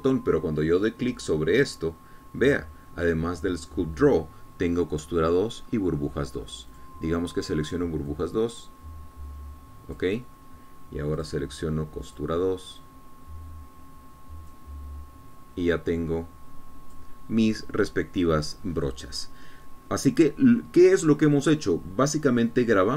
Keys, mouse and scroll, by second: 3.0 click, 8.1 click, 8.8-9.3 scroll up 1, 9.5-11.6 drag, 12.6 click, 13.5 click, 14.2-18.5 drag.